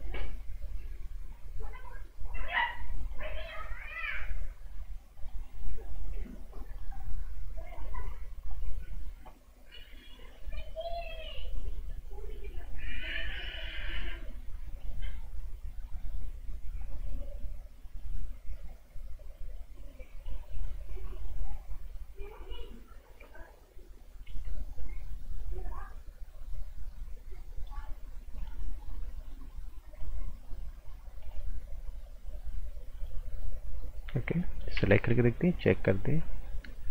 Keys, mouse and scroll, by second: 24.2 g, 24.7 click, 34.4 right click, 34.7 z, 35.6 click.